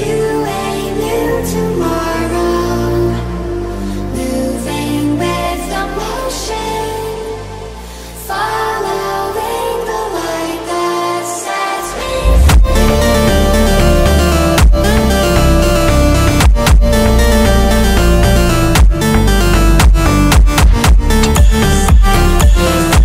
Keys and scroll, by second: 3.5 c, 3.6 o, 4.7-6.2 typing, 14.3 z, 14.6 i, 14.9 p, 16.4 space, 16.9 c, 17.4 e, 19.2-21.3 typing.